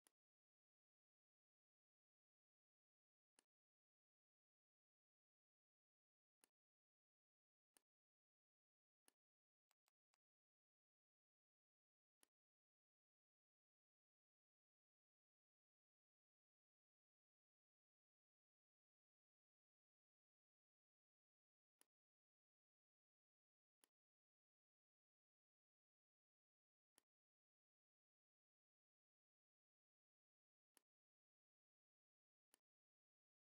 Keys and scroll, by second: 4.9 a, 9.6 space, 10.6 l, 16.5 ctrl+c, 18.2 ctrl+f, 21.1 v.